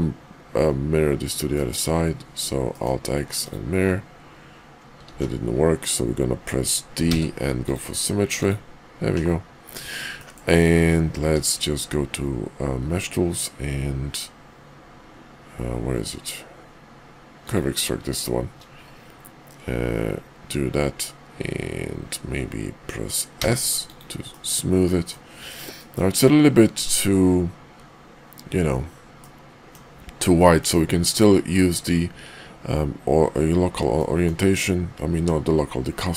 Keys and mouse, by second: 1.5 drag, 2.7 click, 3.5 click, 5.1 alt+x, 8.4 click, 10.1 middle drag, 11.2 q, 24.3-25.1 middle drag, 25.8-26.3 middle drag, 29.2-29.7 middle drag, 30.4 middle drag, 34.0 middle click.